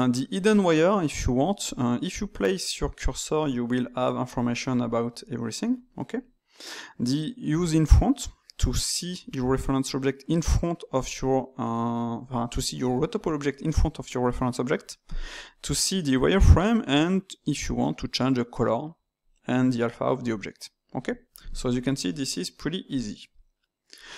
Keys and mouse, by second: 17.4 click, 22.8-24.1 drag.